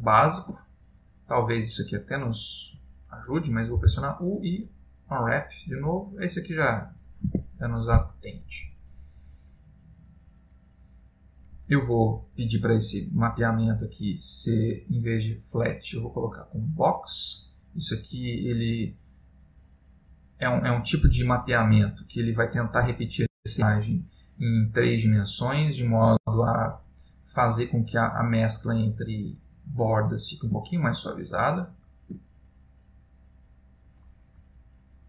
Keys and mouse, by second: 5.7 u, 9.5 Tab, 14.9 click, 30.8 ctrl+middle click, 34.9 middle click.